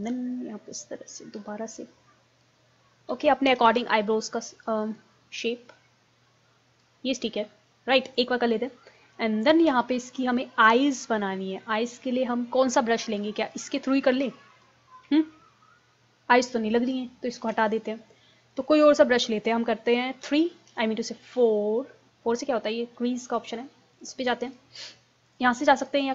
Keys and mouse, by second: 3.6 ctrl+z, 8.4-11.0 middle drag, 13.6-15.4 drag, 17.4 ctrl+z, 20.3 3, 20.8 4.